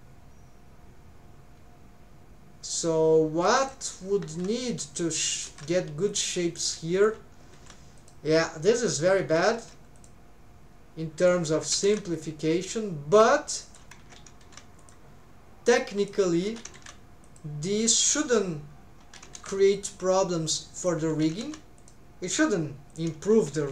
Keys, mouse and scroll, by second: 5.4-6.1 scroll.